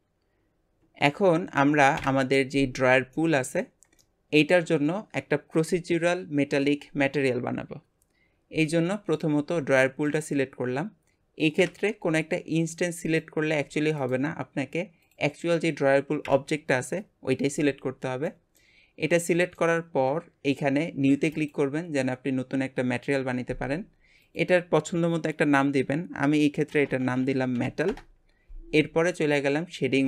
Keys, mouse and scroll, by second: 0.0-2.0 middle drag, 2.0 KP_Divide, 3.2-9.5 middle drag, 9.5 g, 11.6 KP_Divide, 13.2 click, 13.5 g, 15.1 click, 16.2 KP_Divide, 18.3-18.9 middle drag, 18.9-19.2 scroll up 1, 19.2-21.5 shift+middle drag, 21.5-28.0 drag.